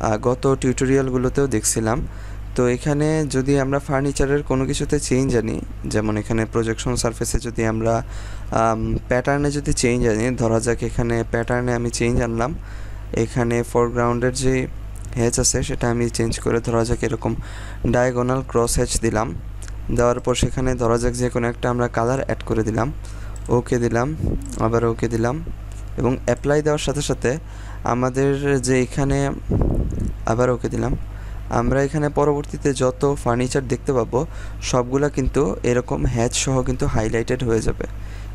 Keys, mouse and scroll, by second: 11.4 click, 15.1 click, 18.5 click, 30.2 click, 31.7-34.6 scroll up 1, 34.6 scroll down 1, 37.8-38.3 scroll up 1.